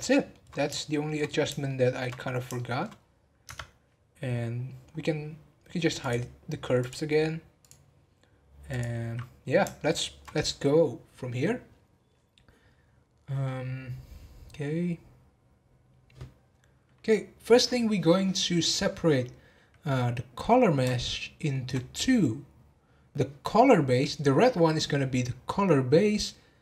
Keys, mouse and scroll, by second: 0.5 scroll down 3, 0.7 shift+middle click, 1.1 scroll up 4, 1.6 shift+middle click, 2.0 scroll down 2, 2.5 shift+middle click, 2.9 scroll down 4, 3.4 Tab, 4.2 scroll up 1, 5.1 scroll up 8, 6.0 click, 6.8 click, 7.6 click, 8.7 click, 9.1 scroll up 3, 9.7-12.9 shift+middle drag, 21.0-24.2 shift+middle drag.